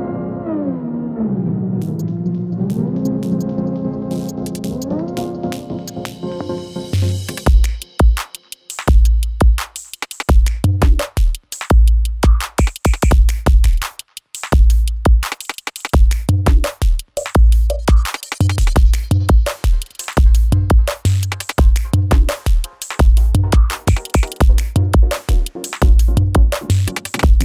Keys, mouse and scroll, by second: 2.1 u, 2.7 click, 3.7 b, 4.2 click, 5.2 e, 5.9 click, 6.9 r, 7.4 click, 11.3 ctrl+shift+s, 13.8 click, 20.3-24.2 typing, 26.0 click.